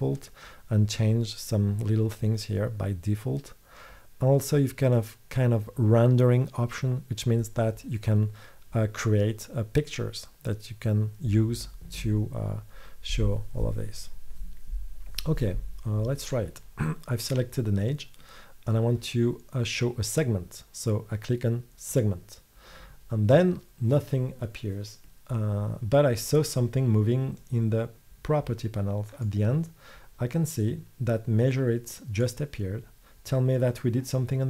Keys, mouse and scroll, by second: 22.0 click.